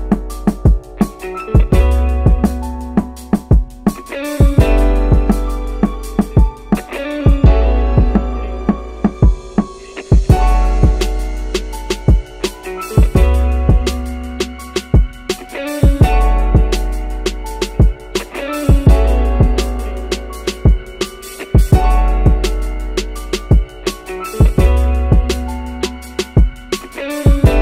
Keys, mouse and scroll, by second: 0.8 click, 1.5-4.0 drag, 4.3 scroll down 1, 5.5 shift+d, 5.7 x, 6.4 click, 8.9 middle click, 10.6 click, 12.1-13.2 middle drag, 14.2 click, 15.6 click, 16.4 click, 17.1-17.5 middle drag, 18.3-22.4 drag, 22.6-24.5 drag, 25.0-25.3 scroll down 1, 25.3-26.1 middle drag, 26.4-27.6 middle drag.